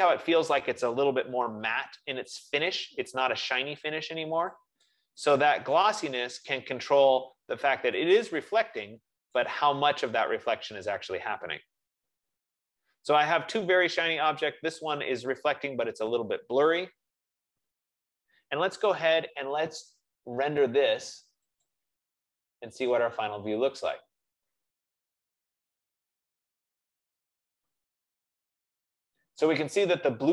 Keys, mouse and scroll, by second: 5.0 click, 6.3 click, 8.2 click, 9.7 click, 21.9 click, 24.6-26.9 drag.